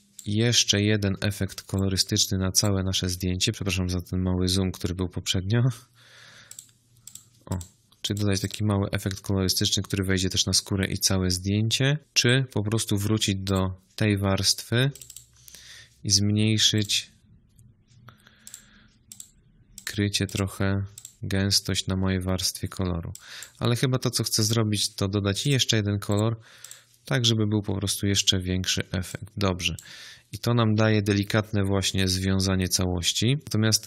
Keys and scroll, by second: 1.2 z.